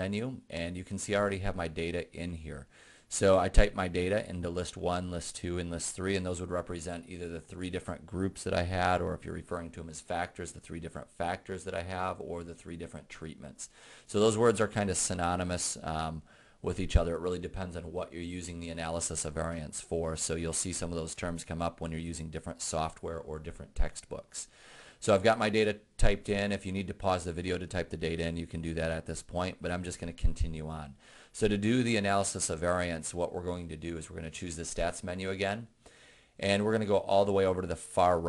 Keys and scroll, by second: 38.1 Right.